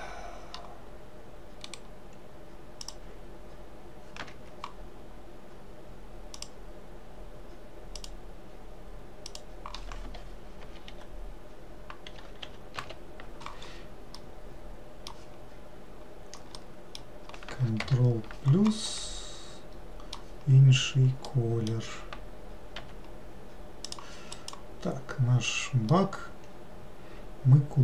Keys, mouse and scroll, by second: 1.8-4.9 right drag, 6.5-11.3 drag, 14.3-17.9 middle drag, 17.9 ctrl+KP_Add, 19.1-22.9 middle drag, 22.9 g, 24.5 click, 25.1-26.1 scroll down 1, 26.1-27.8 middle drag.